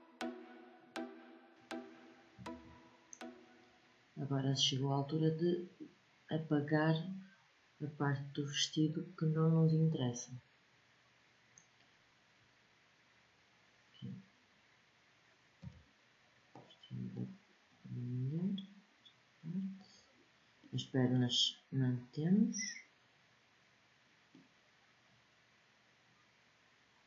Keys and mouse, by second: 1.5 middle click, 3.7-8.5 middle drag, 8.5-13.8 drag, 15.3 b, 17.4 click, 17.8 click, 22.9-24.1 middle drag, 24.5-26.0 drag, 26.0-27.0 middle drag.